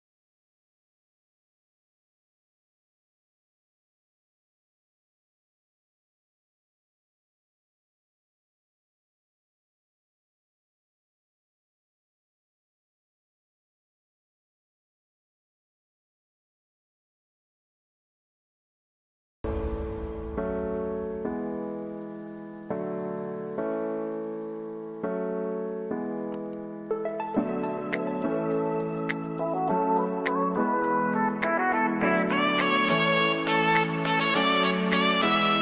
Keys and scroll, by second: 17.4 ctrl+space, 27.8 ctrl+t.